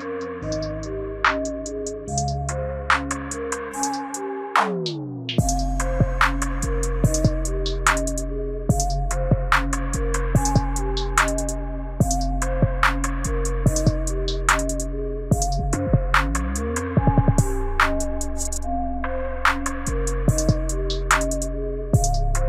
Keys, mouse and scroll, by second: 3.6 space, 12.2 click, 13.0 click, 14.3 click, 15.8-17.3 scroll down 3, 17.3 scroll down 1, 17.4 click, 20.8-21.7 scroll up 7.